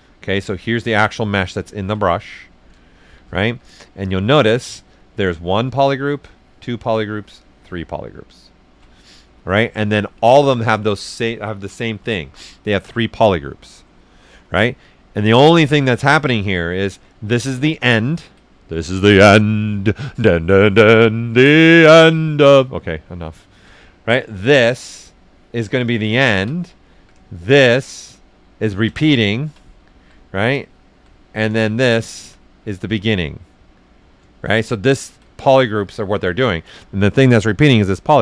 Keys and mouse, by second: 0.0 alt+shift+right click, 2.0 right click, 2.4 alt+right click, 3.0 shift+f, 3.4 s, 3.5-5.0 drag, 9.6 alt+right click, 11.7 typing, 14.8 right click, 14.8 typing, 17.3 ctrl+shift+click, 17.6-23.4 shift+right drag, 25.8 ctrl+shift+click, 26.2 ctrl+right click, 26.9-27.6 typing, 27.3 ctrl+shift+click, 29.0 alt+shift+right click, 29.6 ctrl+right click, 31.2 ctrl+right click, 31.6 ctrl+shift+click, 32.0 ctrl+alt+shift+right click, 33.3 right click, 34.3 ctrl+shift+click, 34.6 ctrl+shift+right click.